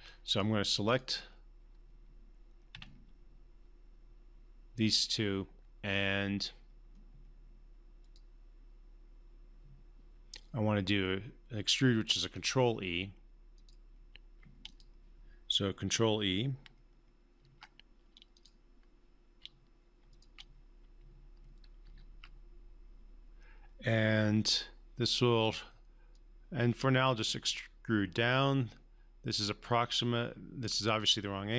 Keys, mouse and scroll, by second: 2.7 q, 4.7 click, 8.0 click, 13.6 click, 17.4 click, 18.3 click, 20.1 shift+click, 21.8 ctrl+e, 24.4-25.7 alt+drag, 27.6-30.6 alt+drag.